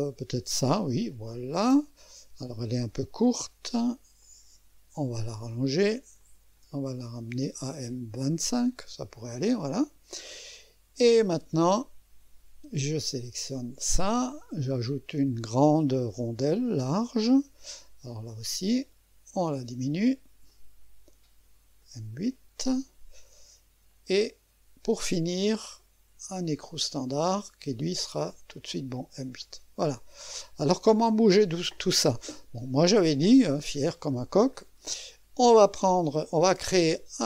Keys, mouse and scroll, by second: 1.1-3.4 middle drag, 3.4-4.2 scroll down 1, 4.2 middle click, 4.4-5.8 drag, 6.2 middle click, 6.4-7.8 drag, 8.1-10.2 drag, 11.0-12.7 drag, 13.1-14.2 drag, 16.4-18.0 drag, 18.8 click, 20.5-26.1 drag, 26.7-28.2 drag, 28.2-29.1 scroll down 1, 29.1 scroll down 1, 29.4-30.4 drag, 30.4 middle click, 31.1 click, 33.5-34.0 scroll down 1, 34.0-34.3 scroll up 1, 34.3 scroll down 1, 34.4 scroll up 1, 34.7-36.8 scroll down 1.